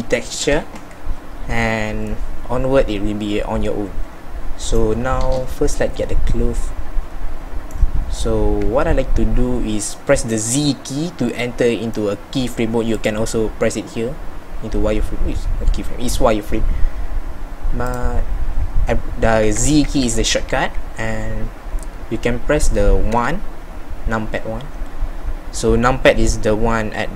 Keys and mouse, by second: 8.7 z, 19.5 z, 19.9 z, 23.1 KP_1.